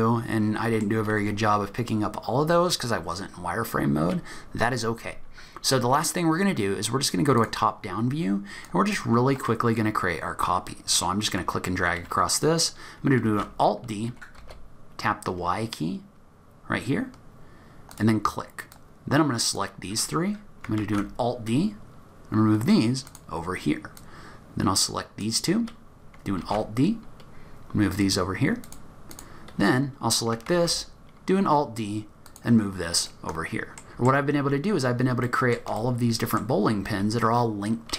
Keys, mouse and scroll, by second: 7.4 click, 8.2-10.5 scroll down 4, 8.6 click, 13.3 alt+d, 18.7 click, 20.9 alt+d, 24.0 click, 26.5 alt+d, 29.1 click, 30.6 alt+d, 33.1 middle click, 33.9 middle click, 33.9-34.2 scroll down 4, 35.2 middle click, 35.8 shift+middle click.